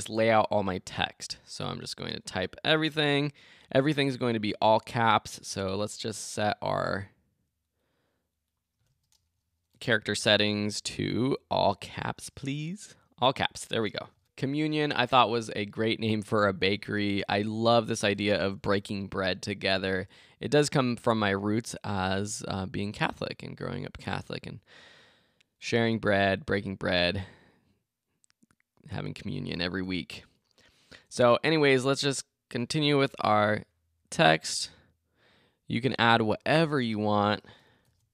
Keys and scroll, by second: 33.0 alt+Return.